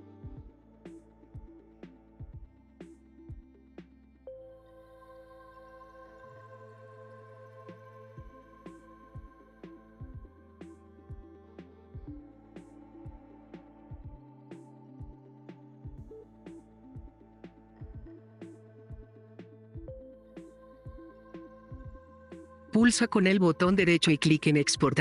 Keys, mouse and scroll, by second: 0.0-1.0 drag, 5.2 click, 8.3 right click, 11.8 click, 15.7 click, 18.3 click.